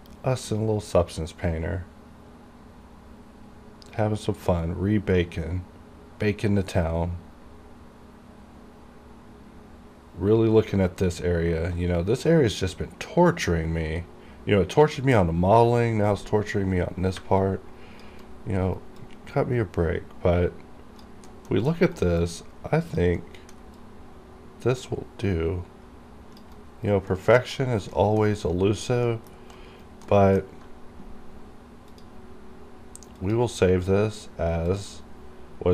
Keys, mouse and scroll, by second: 17.5 alt+click, 18.3 alt+right click, 19.4-21.4 alt+drag, 21.4 alt+middle click, 21.8 alt+right click, 22.3 alt+click, 23.3 alt+middle click, 23.9-26.6 alt+drag, 26.6 alt+right click, 27.2 alt+middle click, 27.7 alt+right click, 28.0 alt+middle click, 28.5 alt+click, 29.1 alt+middle click, 29.7 alt+right click, 30.2-30.6 alt+scroll down 1, 32.0 click.